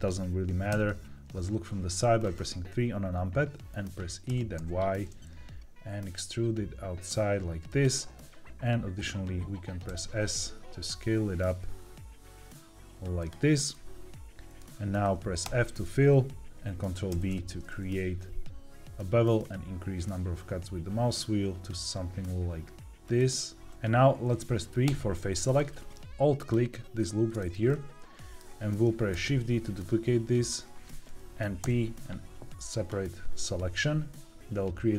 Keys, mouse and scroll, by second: 0.6 KP_3, 1.9-3.7 scroll down 3, 4.2 e, 4.5 y, 7.6 click, 9.8 s, 13.1 click, 13.6 middle click, 14.8-15.3 scroll up 2, 15.3 f, 17.0 ctrl+b, 19.3-19.9 scroll up 1, 23.0 click, 24.8 3, 26.3 alt+click, 27.6-28.7 middle drag, 29.0 shift+d, 30.3 right click, 31.5 p.